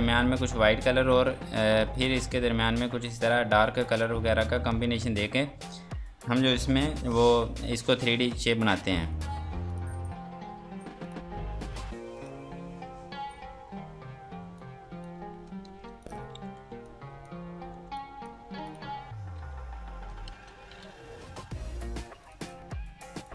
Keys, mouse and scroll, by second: 8.6 click, 14.6 click, 15.6 ctrl+space, 16.0 click, 16.3 F3, 16.8 click, 17.8 F2, 18.0 click, 19.3 h, 20.3 ctrl+space, 21.2 g, 22.2 click.